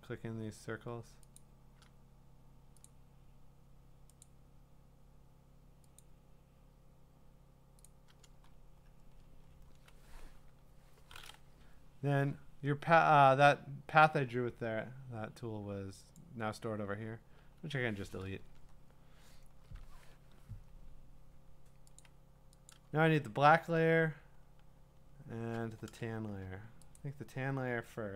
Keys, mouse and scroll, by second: 1.4 click, 4.2 click, 6.0 click, 7.9 click, 8.5-9.6 scroll, 16.2 click, 17.4 Delete, 18.5-19.2 scroll up 12, 19.2 scroll, 19.2-20.4 scroll down 7, 20.4 scroll down 1, 22.0 click, 22.5 scroll, 22.7 click, 23.3-24.7 scroll, 27.0 click.